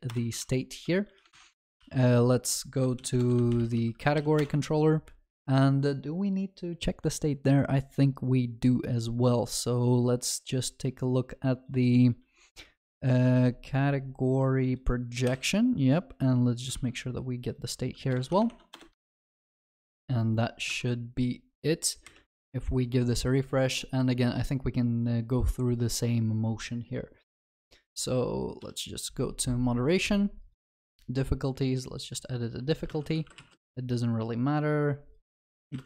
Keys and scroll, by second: 0.1 Return, 1.6 ctrl+c, 3.0 ctrl+shift+n, 15.3 ctrl+b, 17.6 ctrl+d, 18.7 Return, 19.1 ctrl+s, 19.3 ctrl+alt+shift+l, 19.7 ctrl+s.